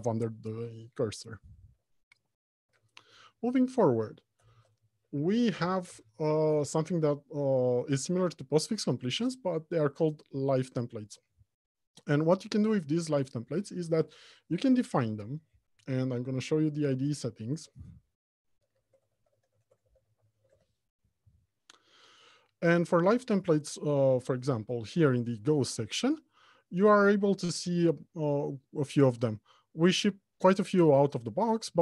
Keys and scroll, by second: 3.1 alt+Home, 3.3 Left, 4.1 Return.